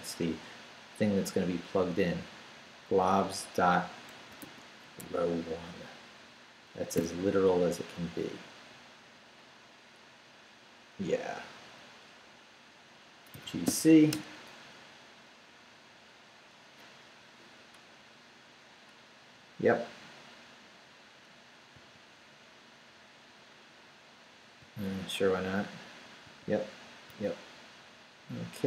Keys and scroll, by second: 3.9-5.0 typing, 6.9 /, 13.4 g, 13.6 c, 14.1 Return, 21.7 y, 24.6 y, 26.2 y.